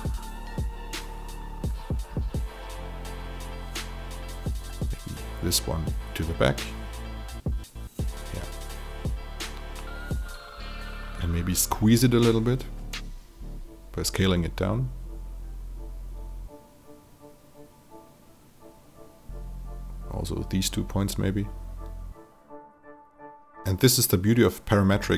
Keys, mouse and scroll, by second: 0.5 alt+click, 1.9 alt+right click, 3.2 click, 3.8 alt+right click, 4.6-7.1 drag, 7.3 alt+click, 9.2 alt+click, 10.1 click, 11.0 shift+click, 12.2 shift+t, 13.1-15.7 drag, 15.7 alt+click, 17.7 click, 20.1-23.4 drag, 23.6-25.1 alt+drag.